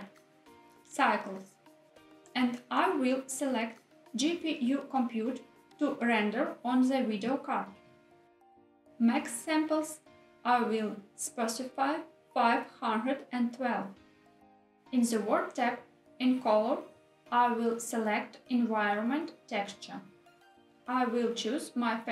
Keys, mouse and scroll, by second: 4.8-6.8 drag, 9.3-13.5 drag, 15.3 click, 18.0 click, 21.3-22.1 drag.